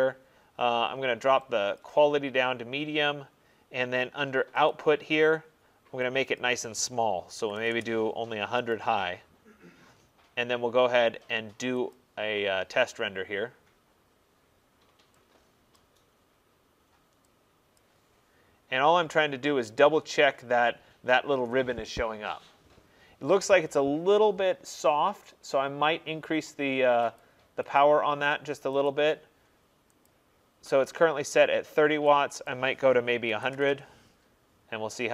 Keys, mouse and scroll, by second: 1.8 click, 4.7 click, 6.4 click, 7.4 typing, 8.8 click, 12.0 click, 15.8 click, 17.8 click, 18.6 middle click, 27.2 click, 27.8 click, 28.9 click, 30.1 click, 32.5 click, 33.3-33.7 typing.